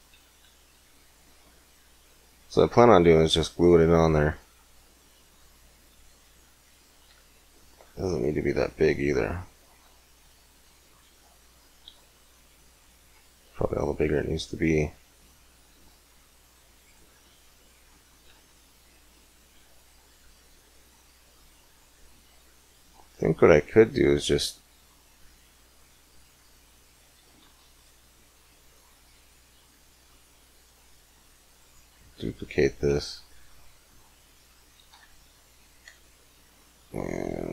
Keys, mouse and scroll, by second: 13.2-15.7 middle drag, 23.7-27.9 middle drag, 34.7-37.5 drag.